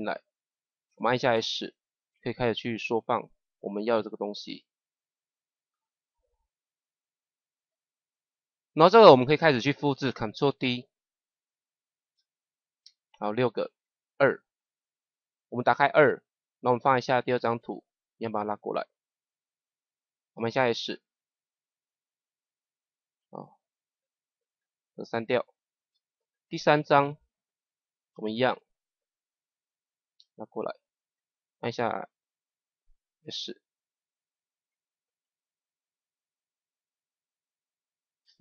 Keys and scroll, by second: 1.2 s, 11.3 ctrl+d, 20.3 s, 25.7 Delete, 33.1 s, 38.2 Right.